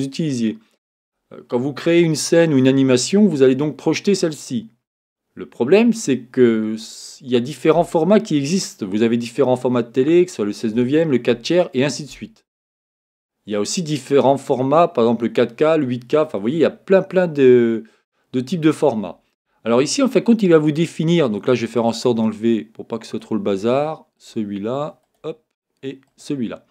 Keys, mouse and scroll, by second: 21.9-23.8 drag, 24.2-26.7 drag.